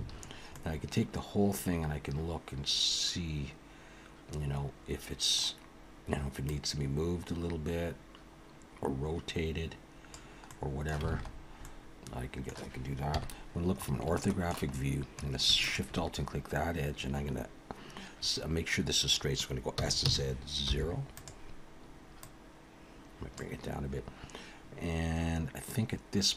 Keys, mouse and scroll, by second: 0.2 scroll down 3, 0.5 middle click, 6.5 click, 10.5 middle click, 11.1 alt+a, 11.3-12.0 scroll down 3, 11.6 middle click, 13.1 KP_1, 13.7 scroll up 4, 14.2 shift+middle click, 14.7-15.3 scroll up 1, 15.6 alt+shift+click, 19.8 s, 22.2 click, 25.7 click.